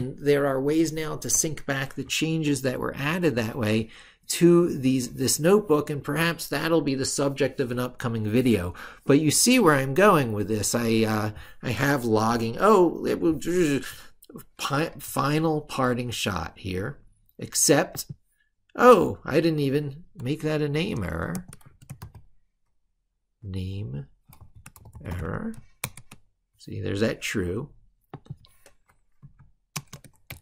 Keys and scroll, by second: 2.3 ctrl+super+Left.